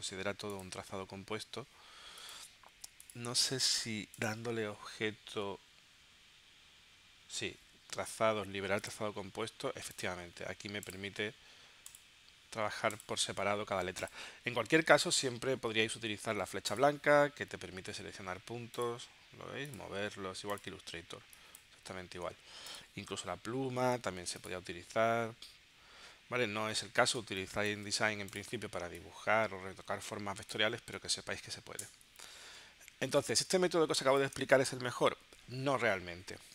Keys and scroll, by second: 22.2 super+z, 27.3 space, 31.9 BackSpace, 33.4 space.